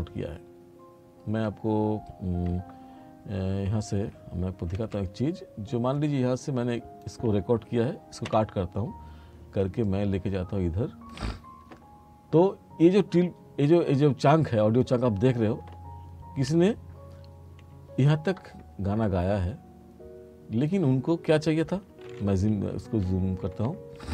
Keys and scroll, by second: 4.8 F7, 8.4 b, 23.1 t.